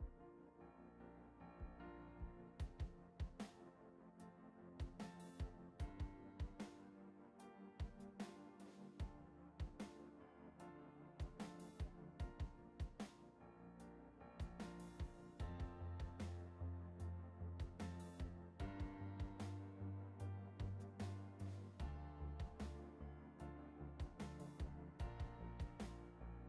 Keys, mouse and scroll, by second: 1.4 click, 5.9-6.5 drag, 8.5-11.8 drag, 14.9 click, 16.2-17.6 drag, 18.8-20.5 drag, 21.7 click, 22.8-24.8 drag, 26.2 click.